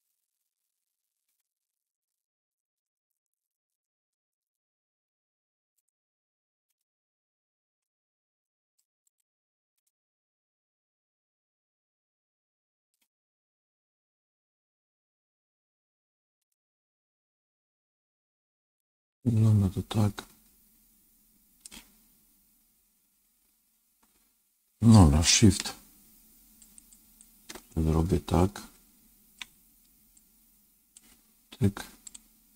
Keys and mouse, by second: 1.2 g, 6.7-8.7 middle drag, 9.8-12.8 middle drag, 14.3 ctrl+z, 15.1 ctrl+z, 16.5-21.6 middle drag, 26.5 shift+click, 26.9 shift+click, 27.7-29.3 middle drag, 30.1 shift+click, 31.9 shift+click.